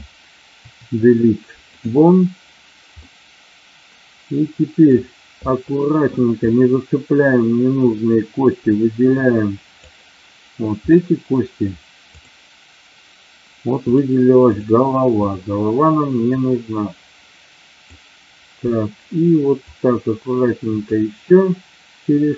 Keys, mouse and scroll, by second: 0.6 Delete, 3.0-4.9 middle drag, 5.5 middle click, 6.5-9.9 drag, 14.5 click, 15.3-17.9 drag, 19.6-21.0 shift+drag.